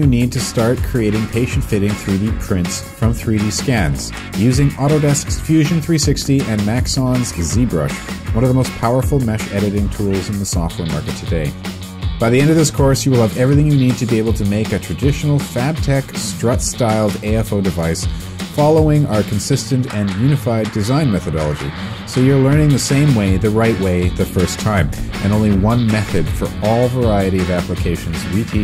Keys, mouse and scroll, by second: 0.1 right click, 0.3 click, 0.3-1.3 typing, 5.1 right click, 5.3 click, 5.7 shift+i, 5.9 Return, 6.2 s, 11.1 alt+space, 11.2 alt+space.